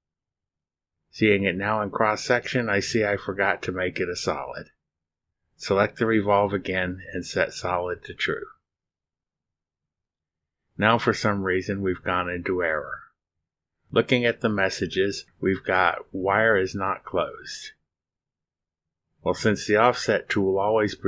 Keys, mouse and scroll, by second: 0.0-0.5 typing, 1.9 click, 2.8-5.8 drag, 6.3 scroll down 1, 7.4 click, 8.2 click, 9.4 click, 10.3 click, 10.4 right click, 12.6 click, 15.4 click, 18.4 click, 20.4 click.